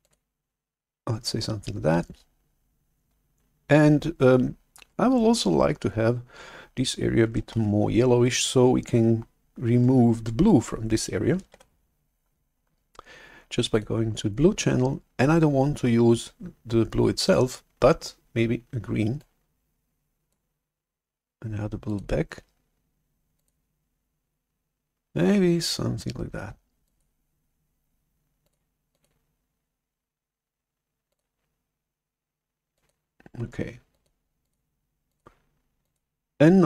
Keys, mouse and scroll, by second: 7.5 shift+super+F11, 11.4 shift+super+F11, 13.6 click, 19.3 click, 21.7 click, 23.3 click, 26.9-33.9 drag, 34.3 click, 35.0 click, 35.7 click.